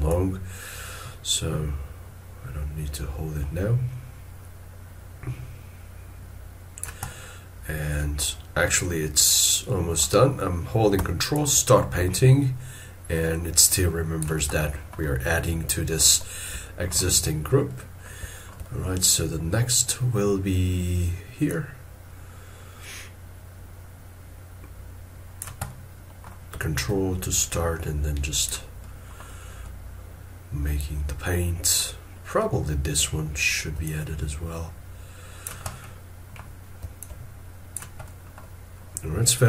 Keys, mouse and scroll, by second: 11.3 ctrl+click, 14.6 middle click, 15.1 scroll down 1, 16.5 middle click, 17.2 scroll up 1, 18.3 shift+middle click, 18.8 scroll up 1, 25.7 middle click, 26.8 ctrl+click, 28.8 middle click, 32.0 scroll up 1, 33.8 ctrl+click, 35.7 middle click, 37.0 ctrl+click, 38.0 middle click.